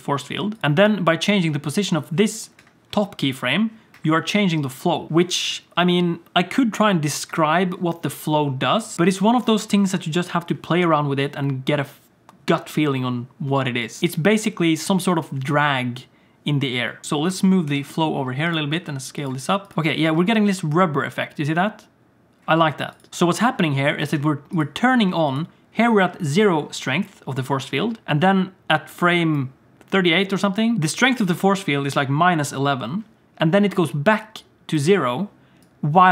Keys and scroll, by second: 1.4 g, 3.2 g, 17.0 ctrl+z, 17.0 g, 17.0 s, 17.7 g, 18.7 s, 19.7 space, 20.1 space, 22.5 space, 23.1 space, 24.0 space.